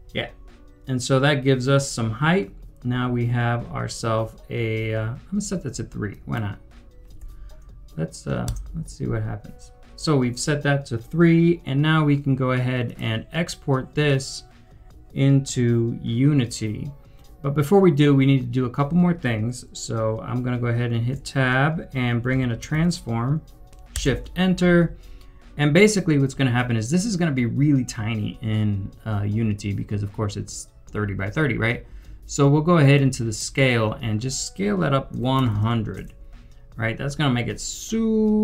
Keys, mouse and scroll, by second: 1.2-1.9 scroll up 1, 7.1 scroll, 7.2 3, 8.4 Return, 21.0 Return, 21.2 Tab, 22.0-23.2 typing, 23.9 shift+Return, 34.9-36.0 typing, 37.3 scroll down 1.